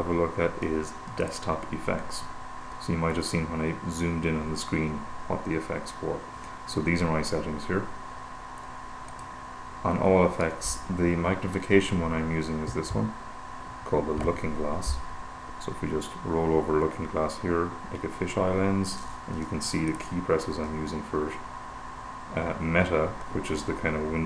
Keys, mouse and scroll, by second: 1.6 click, 6.9-10.1 drag, 11.8 super+=, 20.4 click.